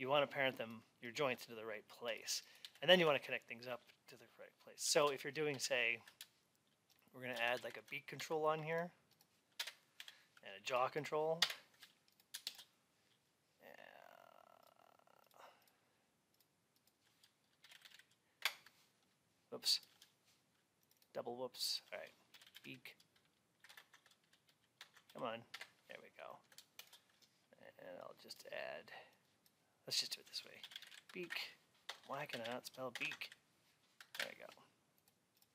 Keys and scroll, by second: 2.5 alt+x, 9.4 Return, 18.3 Return, 23.6 BackSpace, 25.4 Return, 31.7 BackSpace.